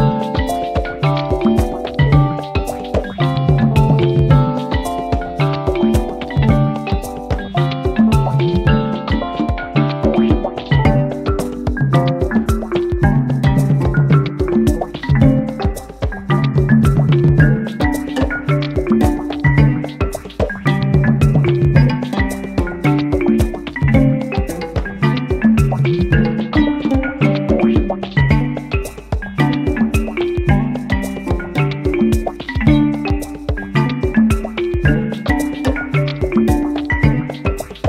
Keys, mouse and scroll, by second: 0.7 click, 3.4 click, 5.6-6.5 drag, 7.3 click, 9.0 F1, 10.2 click, 11.7-17.0 drag, 20.2 click, 22.8 click, 24.7 click, 26.2 click, 27.3 KP_Add, 28.6 space, 36.5 click.